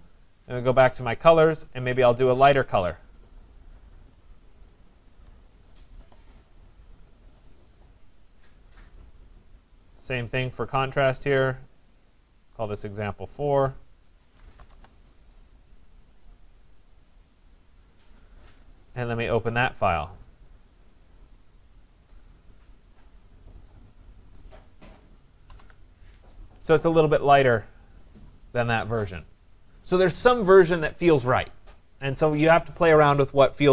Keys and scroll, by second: 14.5 BackSpace, 25.5 ctrl+c.